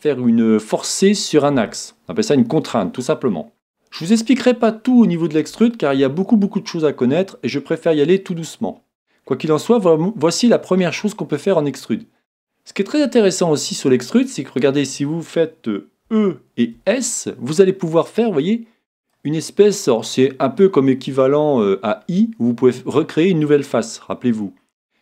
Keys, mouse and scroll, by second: 3.5-5.5 middle drag, 6.9-8.9 middle drag, 12.2-15.9 middle drag, 16.1 e, 19.1-20.8 drag, 19.4-21.9 middle drag, 22.0-25.0 middle drag.